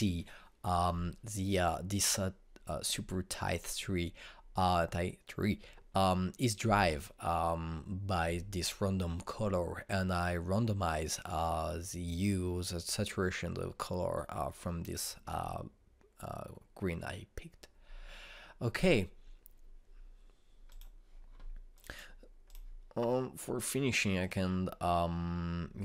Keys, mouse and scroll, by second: 21.7 click.